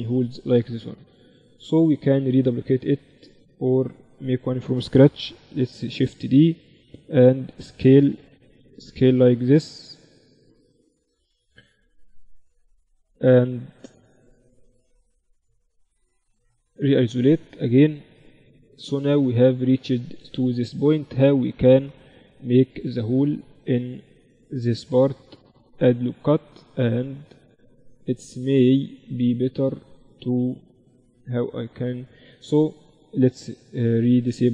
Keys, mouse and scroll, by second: 1.3 KP_1, 4.7 shift+d, 7.3 s, 11.1-12.9 drag, 12.9-16.0 middle drag, 16.0 KP_Divide, 16.9 KP_1, 18.4-20.1 right drag, 18.7-23.2 drag, 19.5 z, 23.2 Tab, 23.7 ctrl+r, 25.7 click, 31.9-33.5 drag, 32.6 o.